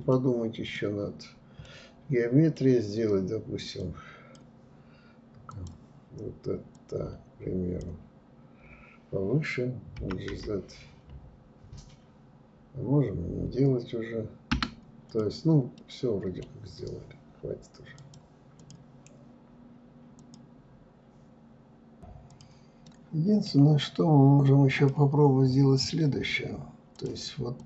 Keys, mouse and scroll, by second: 0.1 scroll up 1, 0.7-2.8 middle drag, 2.8 click, 4.5 click, 5.8 click, 14.1 click, 14.8-17.0 middle drag, 17.0 click, 17.6 click, 21.7-22.8 middle drag, 22.8-23.5 scroll up 1, 23.6 click, 25.8 click, 26.4 click.